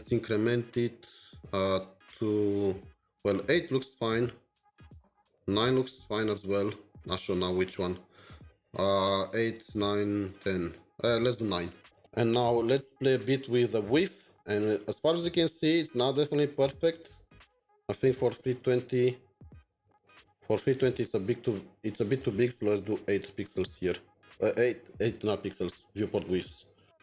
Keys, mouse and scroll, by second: 0.1 Up, 0.1 Up, 0.3 Up, 0.5 Up, 0.8 Up, 1.6 Up, 5.0 Down, 5.2 Down, 5.6 Up, 6.8 Up, 8.2 Up, 8.2 Down, 8.8 Down, 10.1 Up, 10.1 Up, 10.7 Down, 23.0 Down.